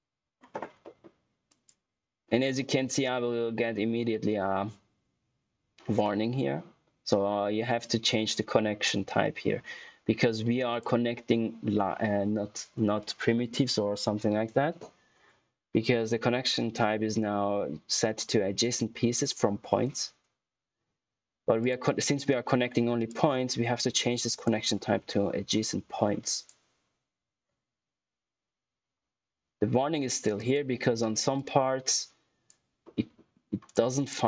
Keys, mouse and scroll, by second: 0.7 middle click, 1.4 click, 10.6 click, 21.8 click, 26.2 click, 30.3 click, 32.8 middle click, 33.2 scroll up 1, 33.6 click.